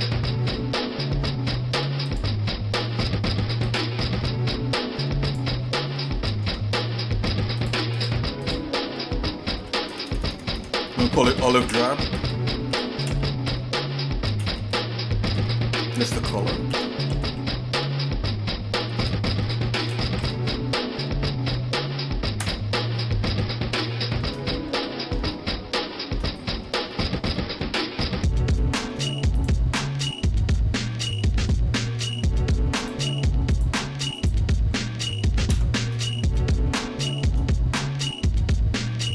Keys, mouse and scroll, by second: 3.9 click, 5.4 click, 6.0 shift+middle click, 6.4 Tab, 7.6-22.4 drag, 10.1 BackSpace, 10.3 BackSpace, 10.7 BackSpace, 19.2 BackSpace, 23.8 shift+middle click, 24.7 scroll down 1, 24.8 scroll up 1, 25.3 shift+middle click, 26.4 middle click, 26.9 shift+middle click, 27.4 middle click, 27.8 middle click, 28.6 shift+middle click, 29.4 click, 30.0 middle click, 30.4 Tab, 30.9-31.9 scroll up 5, 32.1-32.7 scroll down 2, 32.8 click, 33.5 alt+shift+click, 34.4 click, 35.5 ctrl+KP_Add, 36.4 shift+middle click.